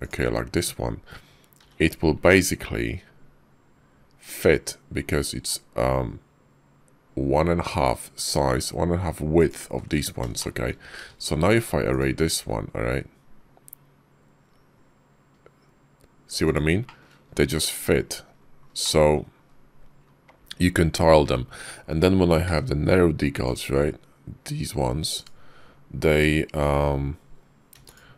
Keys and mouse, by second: 1.4 g, 10.2 shift+click, 10.8 q, 16.7 shift+click, 18.7 click, 19.3 KP_5, 21.1 `, 27.6 x.